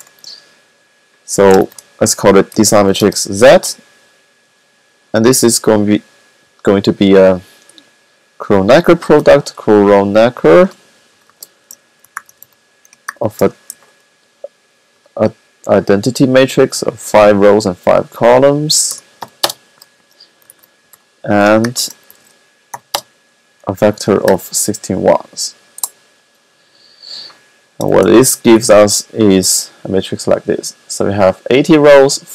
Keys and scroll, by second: 1.5 shift+z, 4.8 typing, 8.8-10.0 typing, 11.0-16.3 typing, 17.9-19.0 typing, 20.0-22.5 typing, 23.9 typing, 27.8 shift+z.